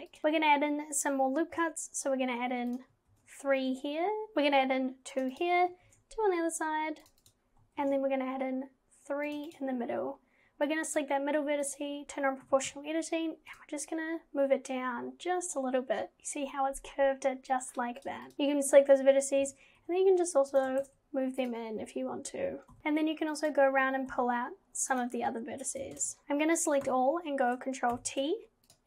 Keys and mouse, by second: 2.7 click, 3.1 ctrl+r, 5.9 ctrl+r, 7.8 ctrl+r, 10.7 click, 11.7 click, 12.4 g, 18.3 KP_1, 19.4 g, 20.8 ctrl+z, 21.4 click, 22.7 g, 26.0 ctrl+z, 26.9 a, 27.9 ctrl+t.